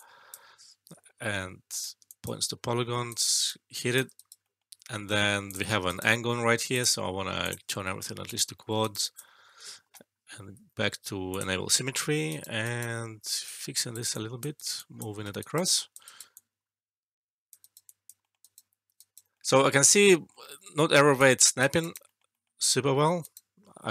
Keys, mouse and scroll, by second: 3.0 right click, 3.4-4.0 alt+click, 4.1 alt+right click, 4.4 alt+middle click, 5.4 click, 5.8 alt+right click, 6.7 click, 8.7 alt+right click, 8.9 alt+click, 10.5 shift+s, 11.3 click, 11.8 alt+middle click, 12.2 alt+right click, 13.7 right click, 14.0 alt+click, 14.5 alt+right click, 14.7 alt+click, 15.3 alt+right click, 15.6 alt+click, 15.9 alt+right click, 16.3-17.5 alt+drag, 17.6 alt+right click, 17.8 alt+click, 18.2 alt+middle click, 18.3 alt+right click, 18.9 alt+right click, 19.3 alt+middle click, 20.3 alt+middle click, 21.2-21.8 right click, 22.0 alt+middle click.